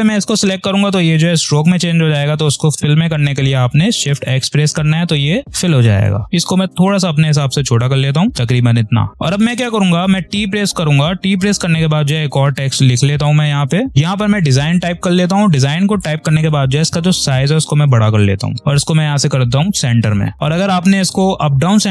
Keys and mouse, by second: 4.0 shift+x, 6.2-9.1 drag, 9.8 t, 11.4 click, 13.3 d, 13.9-18.0 drag, 18.0 ctrl+z, 18.6 click.